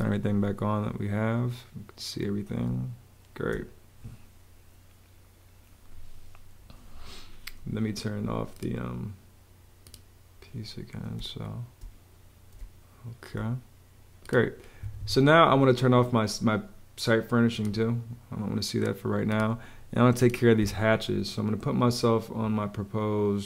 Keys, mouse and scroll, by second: 2.6 space, 11.1 space, 12.6 space, 14.7 Escape, 15.8 Escape, 20.5 Escape.